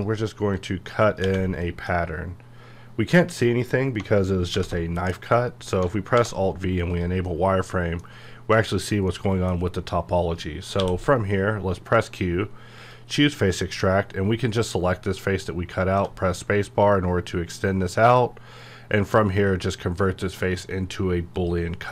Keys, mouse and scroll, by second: 1.2 space, 1.6 middle click, 2.4-3.5 scroll up 1, 5.3 middle click, 6.1 alt+v, 6.9 click, 7.2-10.8 middle drag, 10.8 q, 12.8 click, 15.1-15.5 scroll up 1, 18.1 click, 21.3 click.